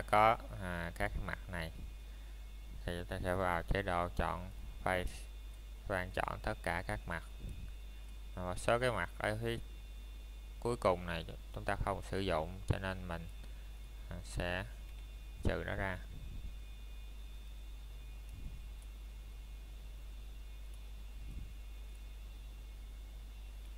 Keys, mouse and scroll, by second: 0.2 scroll down 1, 0.5 middle click, 0.9 scroll up 1, 1.4 middle click, 1.8-2.3 scroll up 1, 2.3 middle click, 3.1 scroll up 1, 4.1 click, 4.4-4.9 scroll down 1, 4.9 middle click, 5.5 scroll up 1, 5.9 middle click, 7.3 click, 8.5 scroll up 1, 14.3 middle click, 15.5-16.0 scroll up 1, 16.0 middle click, 18.7-19.1 scroll up 1, 20.4 middle click, 20.8 scroll up 1, 21.3 shift+middle click.